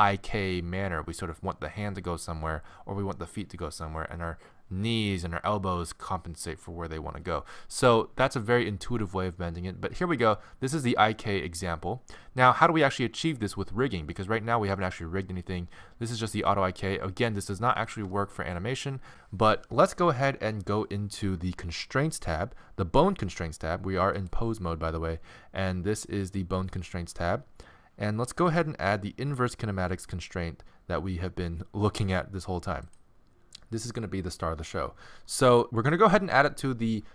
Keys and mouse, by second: 17.9-19.1 middle drag, 24.2-30.3 drag.